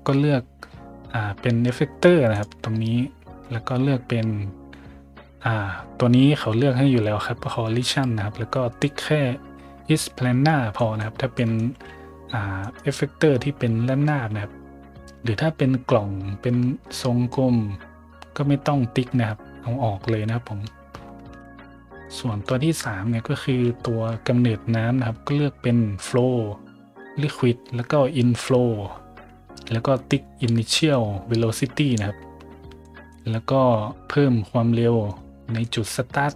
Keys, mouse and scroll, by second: 2.3 click, 10.7 middle drag, 11.3 middle drag, 11.7 a, 12.6 right click, 15.0 middle click, 16.1 middle click, 22.0 right click, 22.4 shift+middle click, 22.8 middle drag, 23.8 shift+middle drag, 32.5 middle click, 32.8 middle drag, 35.6-36.3 scroll up 1.